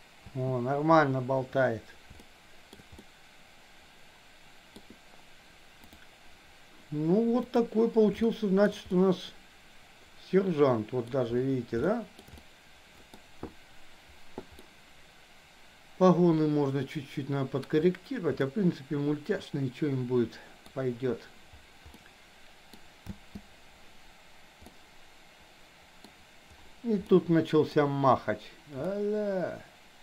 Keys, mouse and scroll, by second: 0.3 space, 2.3-2.8 shift+middle drag, 3.0-4.8 middle drag, 7.5 click, 8.3 shift+middle click, 8.9-11.0 middle drag, 11.9 shift+middle click, 12.3 middle click, 14.5-17.6 middle drag, 18.5-20.6 middle drag, 21.9 middle click, 23.1 space, 24.6-26.1 middle drag, 27.1 middle click, 28.9-30.0 middle drag.